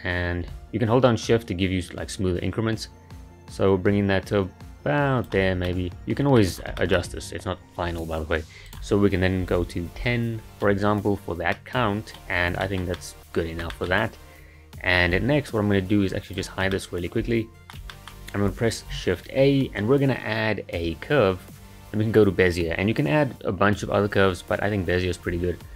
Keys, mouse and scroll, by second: 5.7-6.6 middle drag, 6.6 scroll down 3, 6.8-8.7 shift+middle drag, 8.7-11.5 drag, 11.5-12.4 middle drag, 12.4 scroll down 4, 12.6-14.0 shift+middle drag, 14.0-16.1 scroll up 1, 16.1 click, 16.7-19.3 middle drag, 19.3 shift+a.